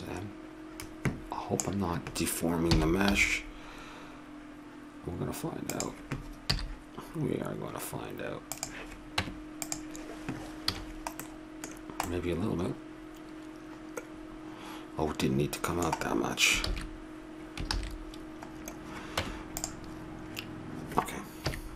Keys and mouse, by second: 2.7 s, 6.5 z, 9.2 Tab, 10.7 a, 10.8-13.3 middle drag, 16.6 ctrl+z, 17.7 ctrl+z, 19.2 Tab, 21.4 KP_3.